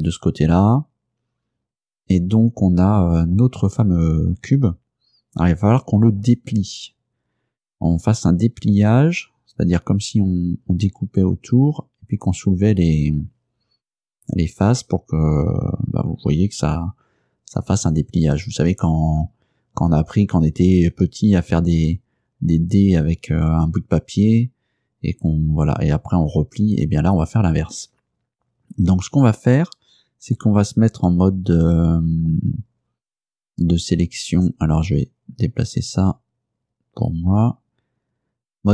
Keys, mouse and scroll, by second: 34.4-37.4 drag.